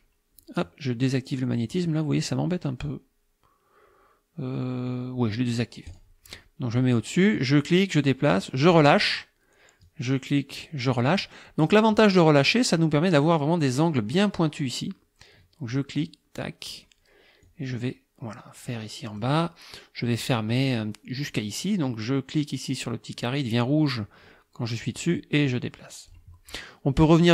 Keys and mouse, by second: 5.9 click, 7.5-8.9 drag, 9.9-11.1 drag, 15.7-16.9 drag, 17.5-19.4 drag, 25.0-26.3 drag.